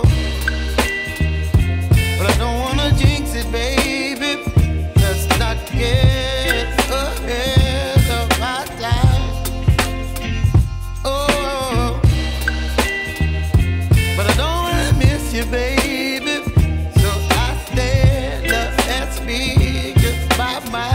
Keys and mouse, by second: 0.5 click, 3.3 click, 5.7 click, 10.2 click, 12.3 click, 16.6 click.